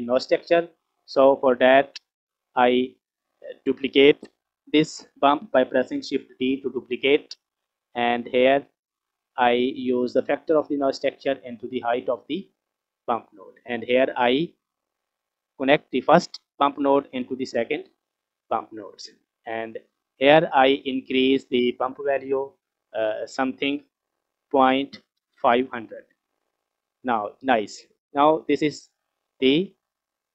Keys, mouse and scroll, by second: 2.5 click, 6.1 shift+d, 10.2-13.3 drag, 14.4-18.3 drag, 19.5-20.2 scroll up 1, 20.2 scroll up 1, 20.3 middle click, 21.5 click, 22.8 click, 23.1-25.8 drag, 25.3 KP_0, 26.7 scroll up 2, 27.6 scroll down 2, 28.3 scroll down 1, 29.2 scroll up 1, 30.1-30.3 scroll down 2.